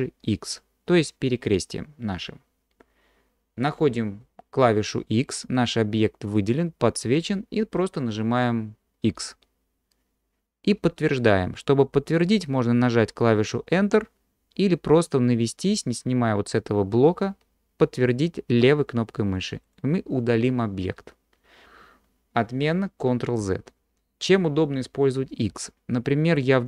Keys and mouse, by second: 9.2 x, 23.1 ctrl+z, 25.5 x.